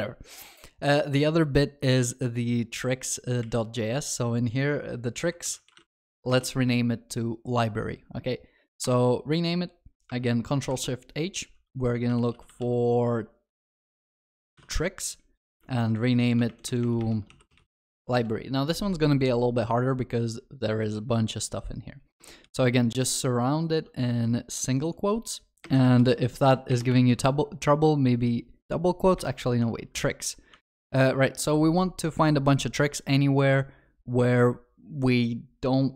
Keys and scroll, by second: 3.5 shift+F6, 10.7 ctrl+shift+r, 16.5 ctrl+BackSpace, 28.6 ctrl+shift+z.